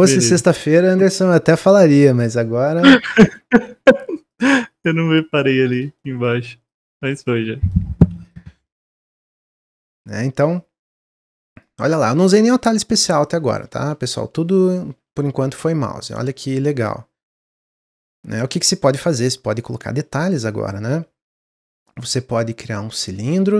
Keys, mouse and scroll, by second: 0.7-1.0 scroll up 1, 1.0-2.4 middle drag, 2.4-4.2 scroll up 1, 4.2 click, 5.7 click, 5.9 middle click, 6.6 click, 7.2-8.2 middle drag, 8.2 click, 8.6-9.7 middle drag, 9.7 click, 10.4 click, 13.5-14.9 middle drag, 14.9 Tab, 15.3-16.0 middle drag, 16.0-16.4 scroll down 1, 16.4-20.0 middle drag, 20.0-23.1 drag.